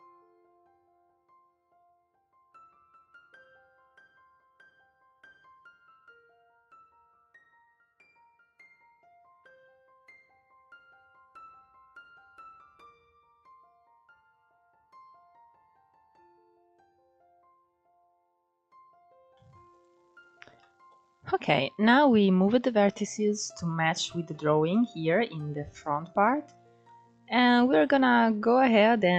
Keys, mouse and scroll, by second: 0.2 shift+middle click, 0.3 scroll up 2, 0.7 click, 1.6 click, 2.3 click, 3.2 click, 3.5 click, 3.9 ctrl+z, 4.5 click, 4.8 click, 5.7 ctrl+z, 6.5 click, 7.1 click, 7.4 click, 7.9 click, 8.7 click, 9.1 click, 9.8 click, 10.5 click, 11.3 shift+middle click, 11.5 click, 11.7 click, 12.1 scroll down 4, 12.3 shift+middle click, 12.4-13.2 scroll up 6, 13.5 click, 14.2 scroll down 3, 14.4 shift+middle click, 14.7 middle click, 15.2 click, 15.8 scroll down 2, 16.0-16.4 scroll up 3, 16.1 shift+middle click, 16.5 click, 16.8 click, 17.3 ctrl+z, 17.5 click, 18.2 click, 18.5 click, 19.2 scroll down 1, 19.4 click, 19.8-20.3 scroll up 2, 20.3-23.3 shift+middle drag, 26.5-29.1 shift+middle drag.